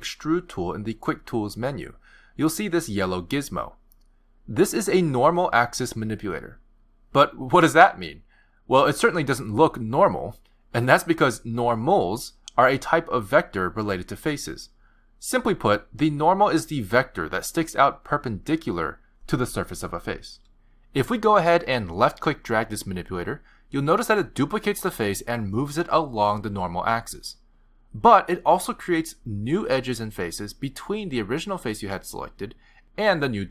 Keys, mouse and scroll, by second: 1.4 click, 14.9 click, 15.8 click, 16.8 click, 17.7 click, 19.5 click, 22.3 click, 30.5 middle click, 31.3 middle click.